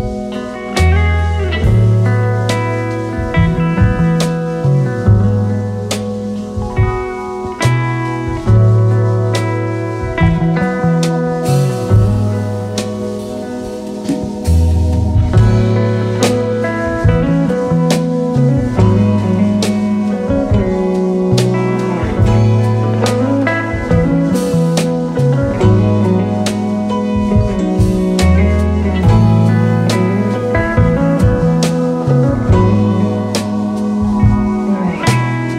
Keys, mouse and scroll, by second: 1.2 shift+click, 1.5 alt+scroll up 2, 4.0-4.4 alt+scroll down 2, 4.4 space, 5.2 alt+scroll up 1, 6.7 shift+click, 7.1 alt+scroll down 2, 7.7-9.0 alt+scroll down 3, 7.7 space, 10.2 alt+scroll down 1, 10.8 alt+scroll down 1, 10.9-11.5 alt+scroll up 1, 11.5 scroll up 1, 11.7 space, 13.1 right click, 15.2 right click, 20.4 alt+scroll up 1, 26.4-26.9 alt+scroll down 1, 27.8 typing, 29.2-29.6 alt+scroll up 1, 30.1-30.7 alt+scroll up 1, 30.8 alt+scroll up 1, 31.8 right click.